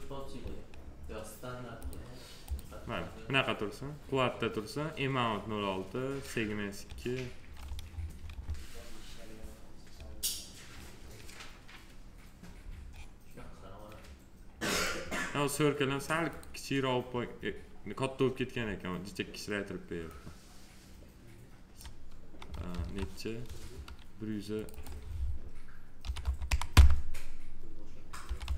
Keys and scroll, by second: 22.7 ctrl+z, 26.0 1, 26.7 Return, 28.2 1.